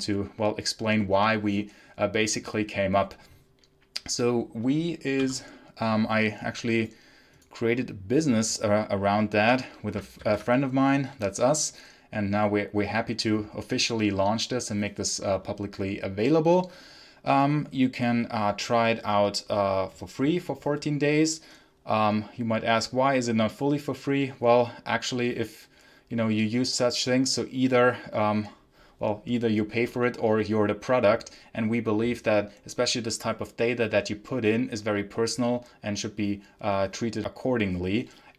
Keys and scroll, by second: 10.1 ctrl+Page_Down.